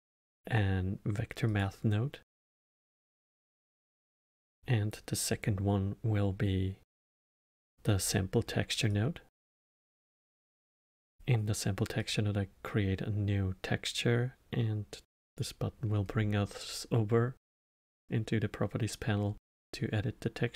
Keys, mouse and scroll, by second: 3.1 middle click, 3.8 shift+a, 8.8-14.9 drag, 15.2-18.2 drag, 19.5-20.5 drag.